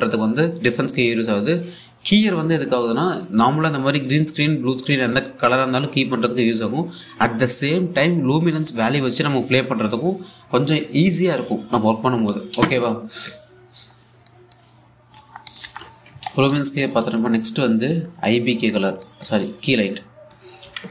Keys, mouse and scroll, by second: 14.2 scroll down 1, 14.9 click, 16.6-17.1 scroll down 1, 17.2 alt+click, 18.0-18.6 scroll up 1, 18.6-19.9 drag.